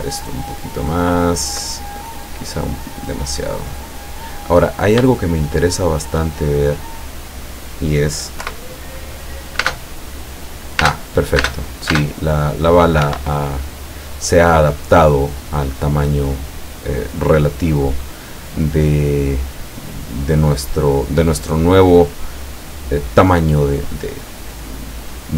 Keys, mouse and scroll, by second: 0.0-1.8 ctrl+drag, 2.7 click, 4.7-5.1 scroll up 1, 5.3-6.4 shift+middle drag, 6.8 scroll up 1, 8.5 p, 9.7 space, 10.9 space, 13.2 Escape, 15.4 scroll down 2, 15.8 scroll up 2, 16.1 scroll down 2, 17.1-17.7 middle drag, 18.7-20.7 middle drag, 21.2-23.5 drag, 23.9-25.3 drag.